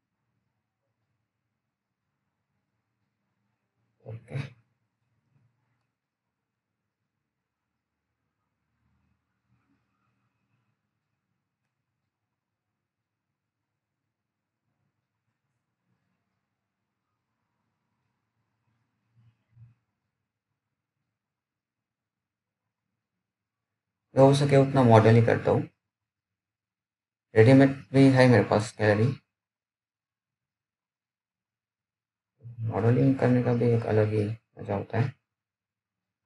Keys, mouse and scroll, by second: 2.1-3.9 scroll down 1, 4.5 click, 5.8-6.9 scroll up 1, 9.7 click, 15.4 scroll up 1, 15.7-17.2 scroll down 1, 17.2 z, 17.9 click, 19.8 right click, 19.9 click, 21.0-21.9 scroll up 1, 22.0-22.7 scroll up 1, 22.7 click, 25.4 alt+middle click, 25.9-26.3 alt+scroll up 1, 26.3-26.6 scroll down 1, 26.8 alt+middle click, 28.0 scroll down 1, 29.5-29.9 scroll up 1, 29.9-31.4 scroll down 1, 31.4-32.2 scroll up 1, 32.2 click.